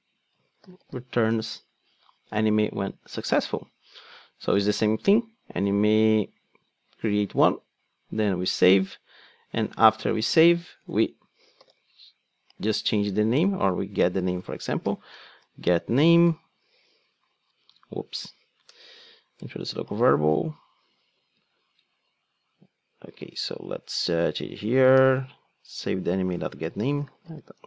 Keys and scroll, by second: 14.1 Return, 16.2 alt+Return, 17.6 super+z, 18.6 alt+Return, 21.5 super+z.